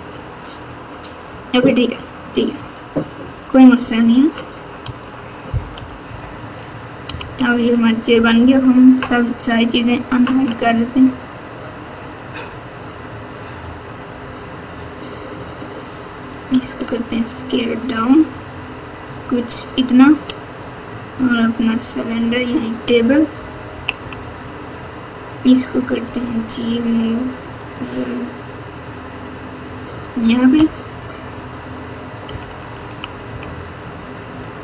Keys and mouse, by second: 2.3 click, 2.6 Tab, 4.3 click, 4.8 Tab, 5.7 KP_8, 6.0 KP_8, 7.0 KP_2, 8.1 KP_Divide, 11.4 click, 12.0 click, 12.9 click, 15.0 click, 15.4 click, 16.5 s, 22.3 click, 23.6 KP_2, 23.9 KP_1, 26.0 g, 30.9 KP_7, 32.2 KP_2, 32.9 KP_2.